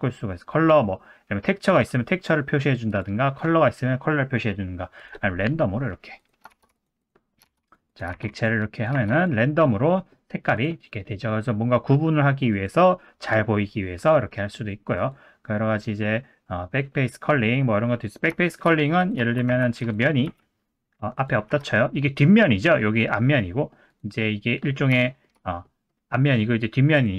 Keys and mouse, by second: 2.9-5.4 drag, 5.5 middle click, 6.2 click, 6.6 shift+d, 7.6 shift+d, 7.9 click, 8.2 shift+d, 8.9 shift+d, 9.9 middle click, 12.6-17.8 drag, 18.0 middle drag, 18.4 shift+middle click, 19.2 Tab, 19.5 3, 19.8 click, 20.3 x, 21.5 Tab, 21.7 middle drag, 22.4-22.7 middle drag, 23.3-23.7 middle drag, 24.7 middle click, 25.0 shift+middle drag, 25.6 middle click, 26.4 middle drag, 26.9 click.